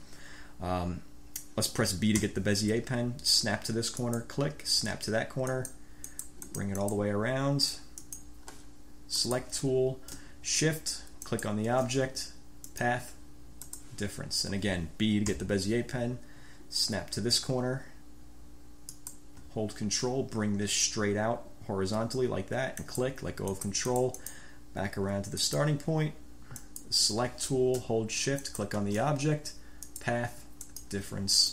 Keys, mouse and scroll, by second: 2.3 b, 4.1 click, 5.7 click, 6.3-7.3 drag, 8.2 click, 9.4 click, 11.4 shift+click, 12.8 click, 13.8 click, 15.5 b, 19.0 click, 22.9 ctrl+click, 23.7-24.7 ctrl+drag, 25.6 click, 26.7 click, 28.6 shift+click, 30.1 click, 30.8 click.